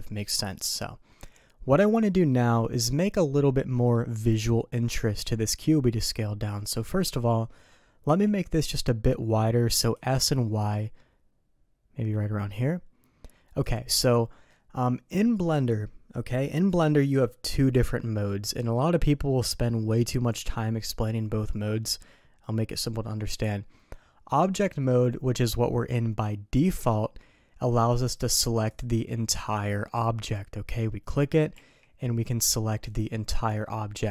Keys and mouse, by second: 2.3 middle click, 3.7 middle click, 6.5 middle click, 8.1 s, 14.0-14.5 middle drag, 24.3-24.6 middle drag, 28.7 click, 30.3 click, 31.5 g.